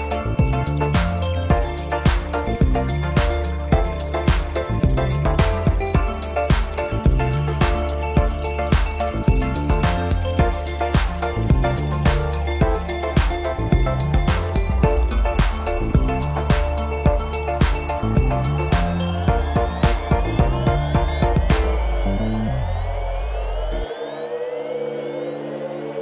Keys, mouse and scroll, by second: 1.1 click, 3.5-6.6 drag, 10.1-12.1 middle drag, 12.1 click, 12.6 scroll down 2, 12.9-14.6 middle drag, 14.6-15.3 scroll up 1, 15.3-15.7 scroll up 3, 15.7-18.7 middle drag, 19.6-20.0 scroll down 2, 20.0-23.0 middle drag, 24.6-25.0 scroll down 2, 25.0-26.0 middle drag.